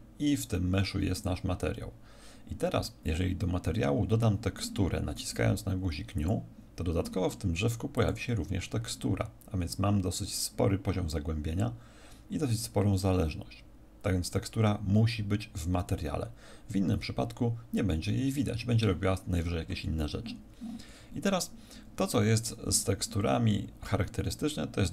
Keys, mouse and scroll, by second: 1.1 click, 6.1 click, 7.9 click, 8.4-9.4 scroll down 2.